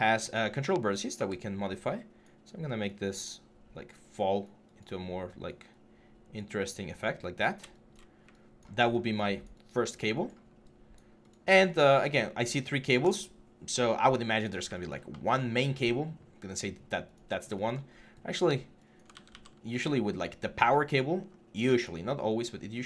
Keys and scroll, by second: 1.0 w, 7.2 6, 18.9 ctrl+z, 19.5 4, 21.5 typing.